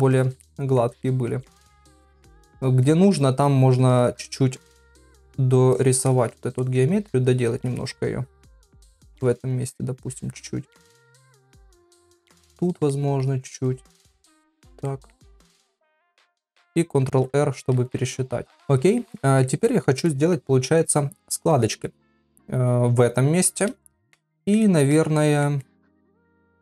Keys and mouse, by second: 0.2 shift+click, 0.4 middle click, 1.1 middle click, 2.1 click, 2.4 click, 2.9 middle click, 4.0 click, 4.3 click, 4.6 click, 4.9 click, 5.1 click, 5.7 click, 6.1 middle click, 6.6 middle click, 7.3 click, 8.0-8.4 [, 8.9 [, 8.9 click, 9.6 click, 10.8 shift+click, 11.1 shift+middle click, 12.1 click, 12.6 click, 12.9 shift+middle click, 13.7 click, 14.9 shift+middle click, 15.6 click, 16.0 click, 18.6 ctrl+middle click, 19.2 middle click, 19.7 shift+middle click, 20.0 middle click, 21.3 middle click, 23.8 shift+middle click, 24.4 middle click, 24.6 shift+middle click, 25.2 ctrl+middle click, 25.6-26.6 middle drag.